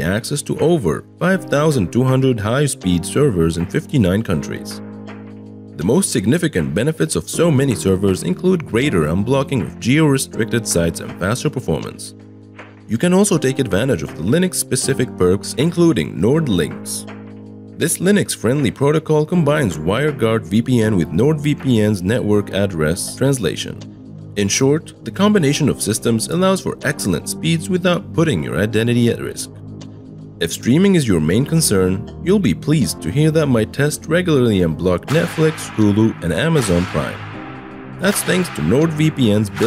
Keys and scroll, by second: 8.1-9.9 typing, 11.9-13.7 typing, 23.3-25.7 typing, 28.3-30.8 typing.